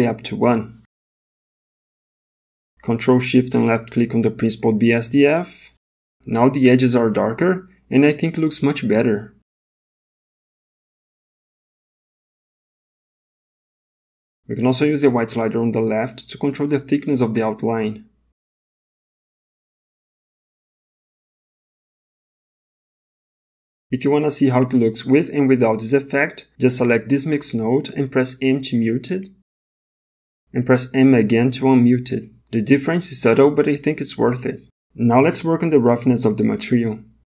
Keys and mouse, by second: 0.1-1.3 drag, 2.8 middle click, 4.6 ctrl+shift+click, 8.6 middle click, 9.4 middle click, 10.0 middle click, 10.9 middle click, 15.1 click, 24.3 middle click, 25.0 middle click, 25.8 middle click, 27.4 click, 28.8 m, 31.1 m, 34.0 m, 35.1 m, 36.9-37.2 drag.